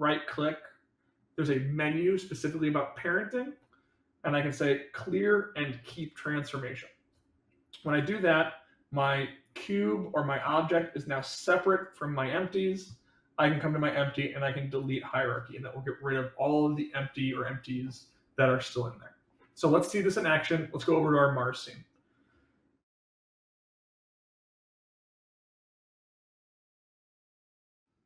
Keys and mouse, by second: 9.4 click, 10.3 click, 11.2 click.